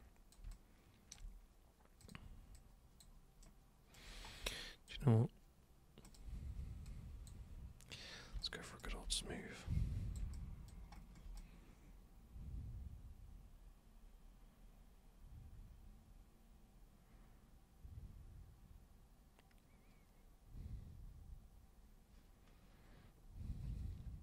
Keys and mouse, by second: 0.0 super+click, 0.5-1.1 alt+super+drag, 2.1 super+click, 2.6 super+click, 3.4 super+right click, 4.6 alt+super+click, 6.0 super+click, 6.9 super+click, 8.3 super+b, 8.4 super+click, 9.2-10.2 super+drag, 10.3 alt+super+click, 11.4-24.2 super+drag.